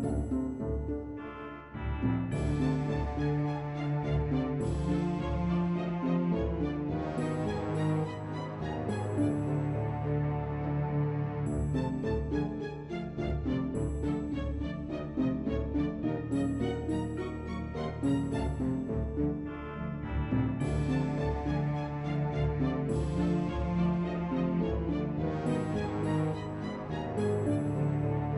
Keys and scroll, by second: 10.5-13.0 typing, 14.1-15.4 typing, 17.5 ctrl+c, 22.6 ctrl+v.